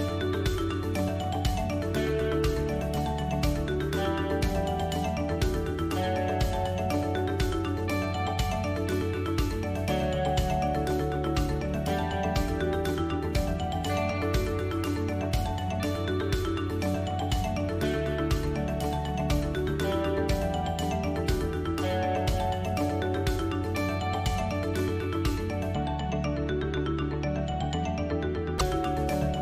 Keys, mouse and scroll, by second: 0.3-1.0 scroll up 3, 2.0 click, 3.4 shift+click, 4.6 shift+d, 6.2 s, 7.7 click, 10.4 shift+d, 11.7 click, 15.7 KP_3, 17.6 alt+h, 19.5 Tab, 20.4 alt+h, 21.8 Tab, 22.6 middle click, 25.2-25.6 scroll up 2, 25.6 middle click, 27.2 shift+click, 28.0 shift+click, 28.5 shift+click, 29.0 shift+click.